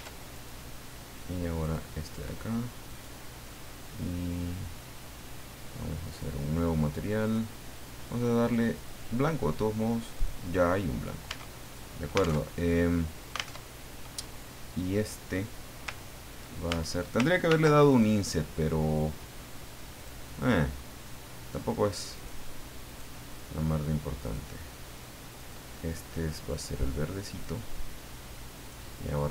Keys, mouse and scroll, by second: 0.4 right click, 1.6 click, 2.9 right click, 6.1 click, 7.2 click, 8.7 click, 10.1 click, 11.3 Tab, 11.6 right click, 12.4 alt+Tab, 13.6 alt+Tab, 16.7 ctrl+Tab, 17.5 ctrl+r, 17.9 ctrl+click, 20.0 click, 22.2 click, 22.9 right click, 24.2 click, 25.4 click, 26.3-27.6 drag, 28.5 right click.